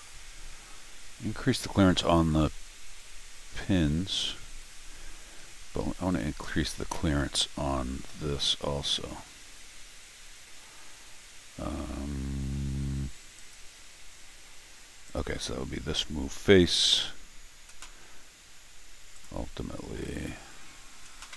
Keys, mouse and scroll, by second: 2.4 scroll up 1, 6.1 click, 8.1 scroll down 2, 9.1-19.2 right drag, 13.4 click, 15.1 click, 19.1 click, 19.7-20.5 scroll up 4.